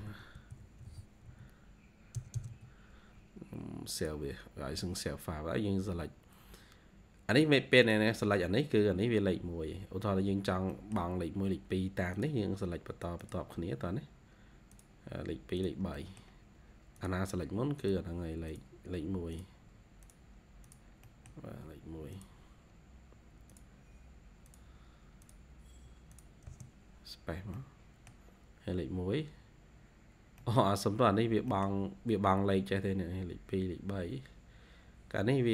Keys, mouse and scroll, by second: 0.0-2.4 typing, 5.5-5.9 scroll up 2, 5.9 typing, 8.7 scroll down 1, 9.1-9.7 typing, 9.4 scroll up 1, 10.6 middle click, 13.5-14.5 scroll down 1, 15.8 middle click, 20.9 middle click, 21.4-22.3 scroll up 1, 22.3 scroll down 1, 26.4 space, 27.5 middle click, 30.3 middle click, 31.4 middle click, 34.8 scroll down 1, 35.4-35.5 scroll up 2.